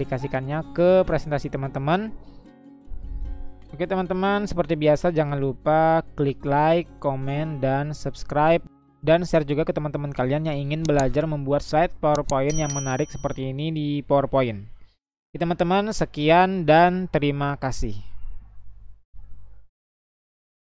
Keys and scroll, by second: 0.1 Down, 2.0 Down, 6.5 Up, 8.6 Up, 10.4 Down, 14.9 Down.